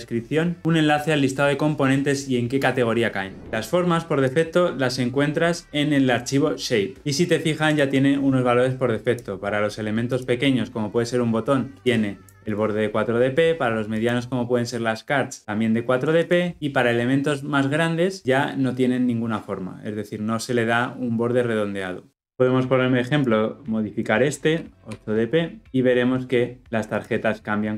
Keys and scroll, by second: 26.8 shift+F10.